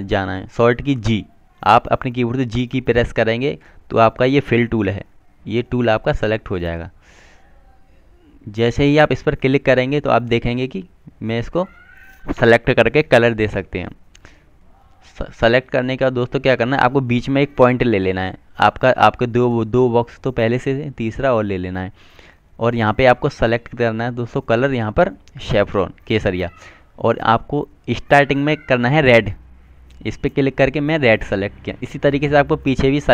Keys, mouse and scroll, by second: 3.5 g, 10.3 click, 18.4 click, 18.6 double click, 21.7 click, 27.1 click, 31.9 click.